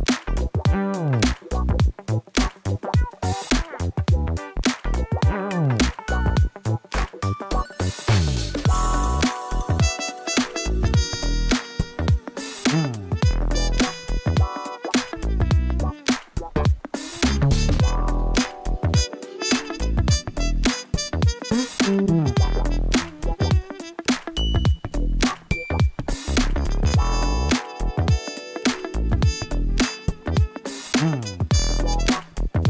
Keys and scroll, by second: 4.7 x, 9.9 shift+r, 20.4 shift+d, 20.7 y, 31.5 alt+a.